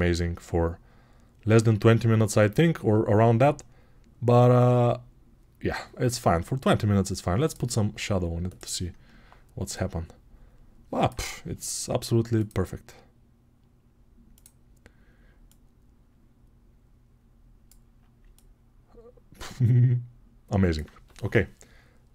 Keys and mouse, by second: 0.0-22.1 drag.